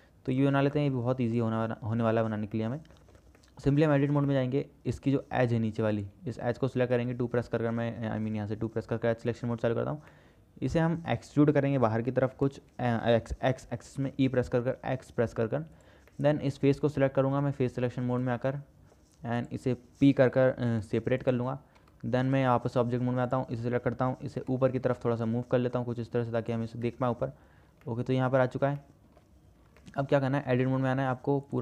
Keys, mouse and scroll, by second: 0.5 click, 0.9-1.5 drag, 2.8-3.3 shift+middle drag, 3.6 middle click, 4.1 Tab, 4.5-5.8 middle drag, 7.2 F2, 10.3-11.6 drag, 12.6 e, 16.5 middle click, 18.3 click, 18.9 click, 20.9 p, 22.0 Escape, 22.5 Tab, 24.6 g, 27.0 KP_0, 28.0 shift+middle click, 29.0 shift+click, 30.0-30.6 shift+drag, 30.7 Tab.